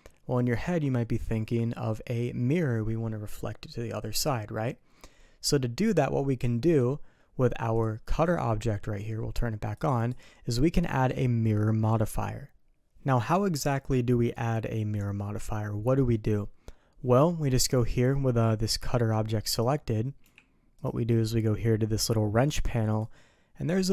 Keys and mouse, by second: 7.7 click, 9.7 click, 9.9 click, 19.6 click, 20.2 g.